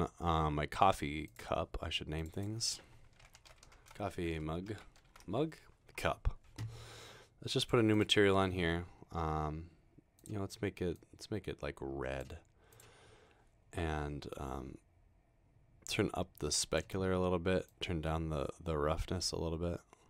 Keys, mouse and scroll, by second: 1.3 click, 3.1-5.6 typing, 7.6 click, 8.0 click, 9.1-10.3 scroll down 2, 11.1-12.2 drag, 13.2-14.2 scroll down 2, 14.4-16.5 drag, 17.8-20.0 drag.